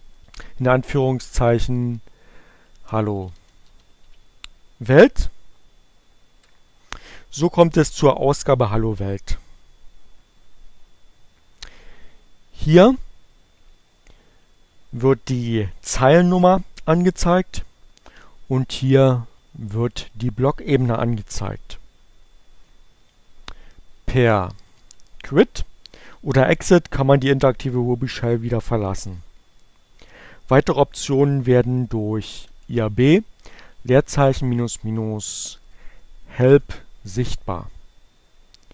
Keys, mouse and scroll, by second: 0.6-3.9 typing, 4.6 Return, 13.4-14.7 drag, 17.6-19.9 drag, 22.6-25.1 typing, 22.7 click, 27.5 Return, 30.0-31.1 typing, 32.5 space, 32.8 -, 33.1 h, 34.8-35.7 typing, 37.8 Up, 38.0 BackSpace.